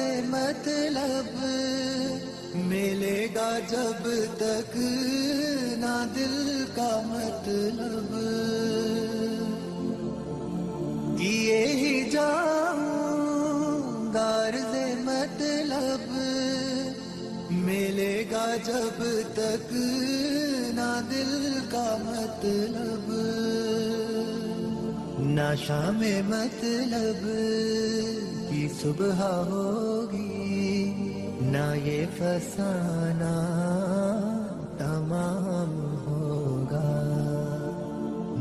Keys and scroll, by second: 1.1 space, 1.7 e, 2.4 Escape, 10.5 F3, 11.9 ctrl+g, 12.2 F3, 19.1 F2, 27.9 F3, 31.7 shift+Page_Up, 32.6 Escape.